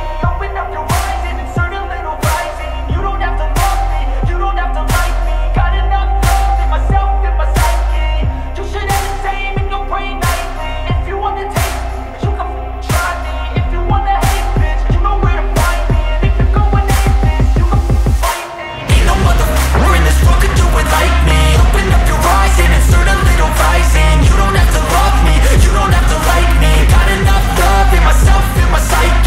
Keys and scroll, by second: 6.0 ctrl+alt+space, 12.1 ctrl+space, 14.6 ctrl+t.